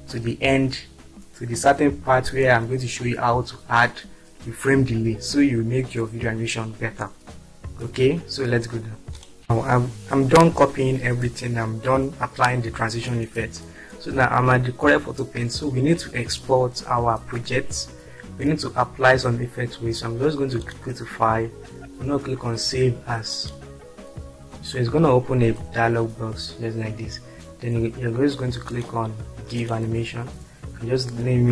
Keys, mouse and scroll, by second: 8.1 click, 8.8 click, 15.3 click, 25.9 click, 28.7 click, 29.9 click.